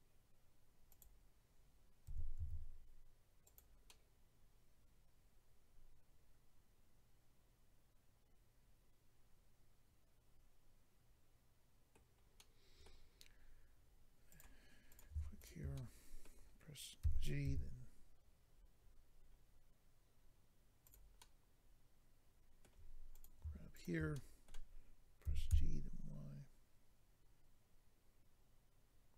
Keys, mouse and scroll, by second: 0.9 click, 1.0 click, 2.0-2.4 typing, 3.4 click, 3.9 middle click, 12.4 middle click, 14.3 click, 14.4 click, 14.9 click, 15.0 click, 15.4 shift+click, 15.5 shift+click, 15.7 middle click, 17.0-17.4 typing, 18.5-19.2 scroll down 5, 20.8 click, 21.2 middle click, 23.1 click, 23.7 shift+click, 24.1 middle click, 25.3-25.7 typing.